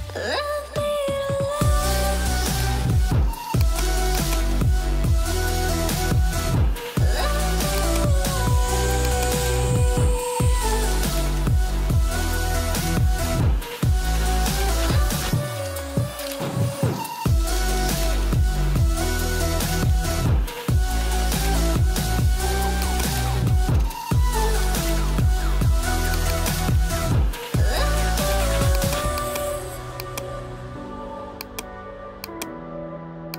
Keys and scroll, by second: 28.0 shift+c.